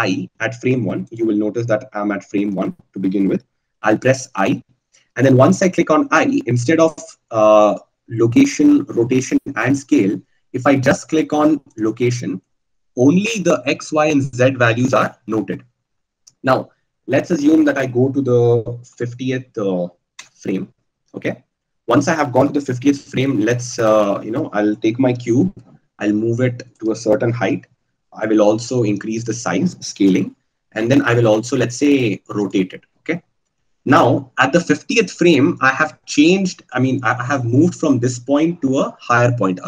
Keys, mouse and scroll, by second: 0.4 i, 1.7-5.5 drag, 5.5 i, 24.8 g, 28.6 s, 31.4 r.